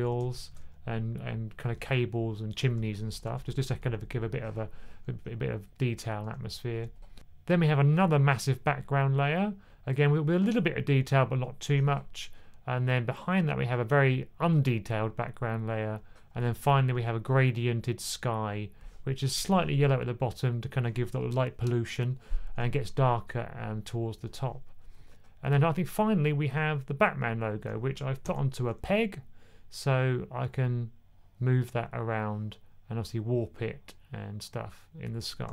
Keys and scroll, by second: 0.0-0.4 typing, 3.2 1, 6.1 1, 16.4 1, 16.8 1, 35.4 super+z.